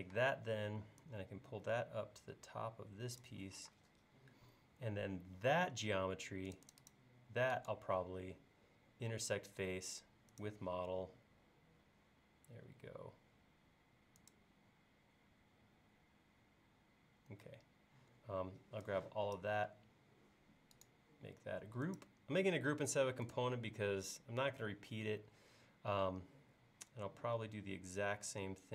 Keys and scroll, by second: 0.1 p, 3.8 space.